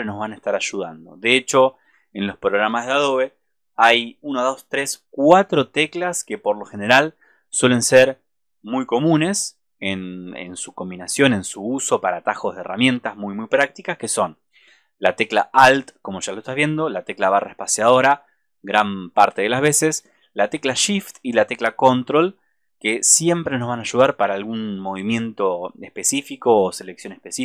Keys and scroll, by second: 9.0 alt+space.